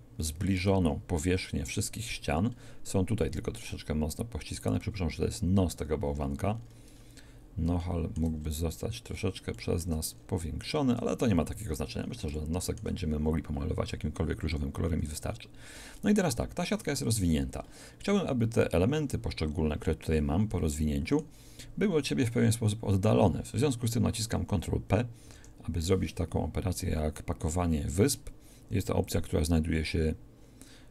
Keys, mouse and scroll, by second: 2.6 shift+middle click, 2.8 shift+middle click, 25.3 ctrl+p, 29.0-30.2 drag.